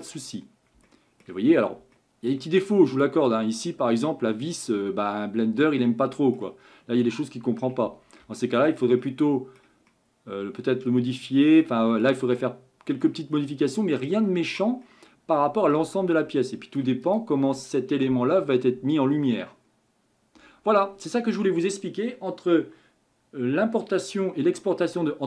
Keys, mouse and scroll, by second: 0.3-0.9 scroll up 6, 0.9-1.5 shift+middle drag, 1.5 scroll up 3, 1.9-2.9 shift+middle drag, 2.9 click, 3.9-6.7 middle drag, 6.7 scroll up 2, 7.8 Tab, 8.4-13.1 shift+middle drag, 13.1 scroll up 1, 13.3-14.8 scroll down 14, 14.8-15.8 middle drag, 15.8 Tab, 16.4-17.1 shift+middle drag, 17.1 click.